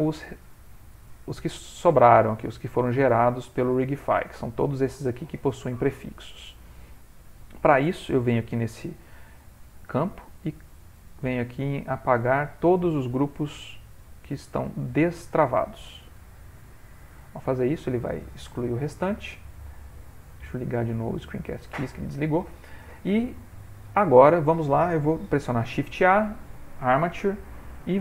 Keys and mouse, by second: 21.1 typing, 22.1 middle click, 23.1 shift+middle click, 23.8 middle click, 24.0 middle click, 24.0 shift+middle click, 24.9 middle click, 25.1 shift+middle click, 25.6 shift+a.